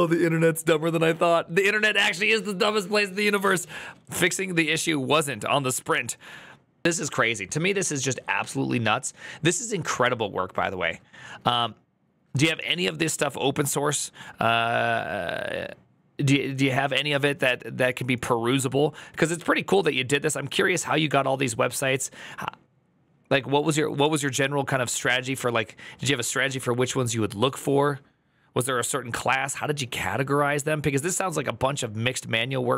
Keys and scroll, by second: 6.8 alt++.